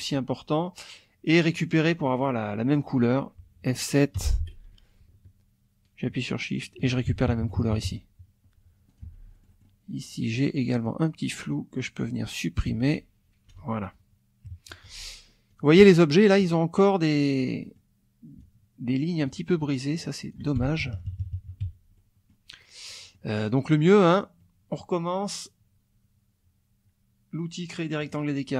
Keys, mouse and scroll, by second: 1.2-2.3 drag, 2.6 click, 4.2 F7, 6.5 shift+click, 7.1 shift+F1, 7.3 shift+KP_Subtract, 8.9 click, 9.0 F2, 9.3 middle click, 10.3 click, 10.7 click, 12.7 F1, 13.5 Delete, 14.5 KP_Subtract, 14.9 F2, 15.5 click, 16.5 click, 17.6 click, 18.4 ctrl+click, 19.9 ctrl+click, 20.6 ctrl+F1, 20.8 ctrl+KP_Subtract, 21.6 ctrl+F1, 22.0 ctrl+click, 23.0 click, 23.7-24.9 drag, 28.0 click.